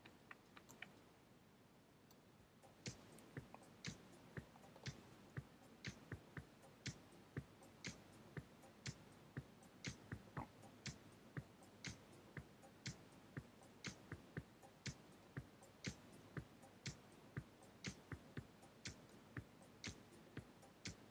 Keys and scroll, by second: 5.8 Left, 6.3 Down, 8.0 Up, 9.6 Down, 10.7 Right, 11.4 Left, 11.7 Down, 12.9 Right, 13.4 Left, 13.7 Down, 14.2 Down.